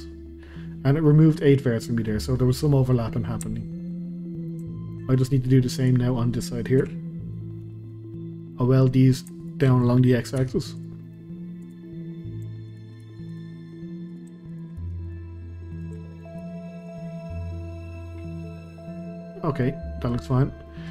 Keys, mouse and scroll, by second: 2.1 scroll down 2, 2.4 middle click, 3.1-3.5 scroll down 2, 3.5 shift+middle click, 4.1 scroll down 2, 4.3-5.8 shift+middle drag, 5.8 click, 6.8 KP_Decimal, 7.3-7.7 scroll down 1, 8.4-8.7 middle drag, 8.7-9.4 scroll up 1, 9.4 shift+click, 10.4 q, 11.0-11.6 middle drag, 11.6 click, 11.9-12.7 middle drag, 12.7 shift+click, 13.0 q, 13.6-14.1 middle drag, 14.1 click, 14.5 shift+click, 14.8 q, 15.7 click, 16.1 shift+click, 16.4 q, 17.1 scroll down 2, 17.3-20.3 middle drag, 20.3 scroll down 1, 20.6-20.9 middle drag.